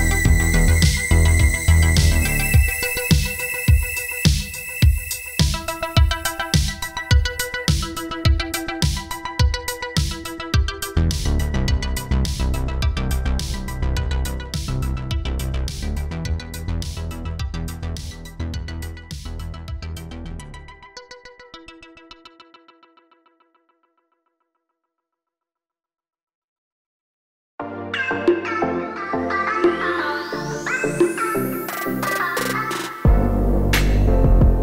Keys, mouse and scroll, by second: 2.0 right click, 2.6 right click, 3.3 click, 9.4 shift+a, 10.7 click, 12.0 click, 20.3 click, 22.5 click, 23.0 click, 25.2-25.5 scroll down 5, 25.5 click, 26.0 click, 27.8 click, 28.0 click, 29.6 click, 31.3 middle click, 31.6-32.1 scroll down 3, 32.1 shift+a, 33.8 shift+middle click.